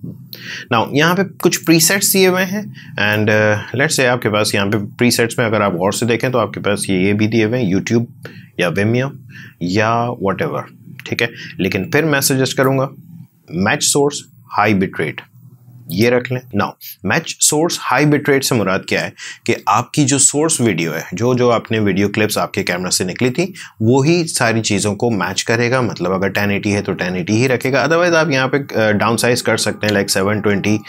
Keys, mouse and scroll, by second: 1.6-11.5 shift+drag, 11.9-15.8 shift+drag, 27.4 shift+click.